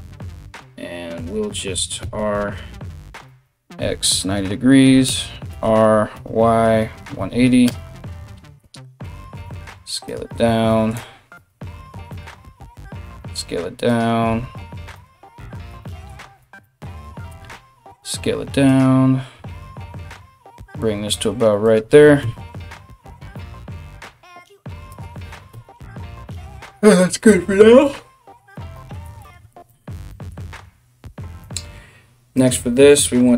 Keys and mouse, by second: 1.6 r, 5.1 r, 8.2 g, 9.1 s, 11.0 g, 12.7 s, 13.9 g, 16.9 d, 17.5 s, 19.0 g, 21.8 KP_3, 23.0 g, 25.1 KP_1, 31.0 right click, 31.1 middle click, 32.1-33.3 drag.